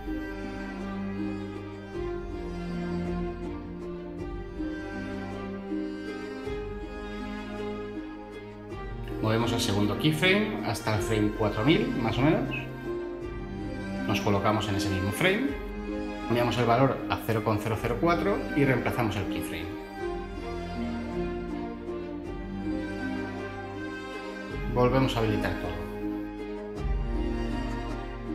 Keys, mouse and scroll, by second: 5.9 space, 17.7 BackSpace, 18.1 4, 18.8 Return.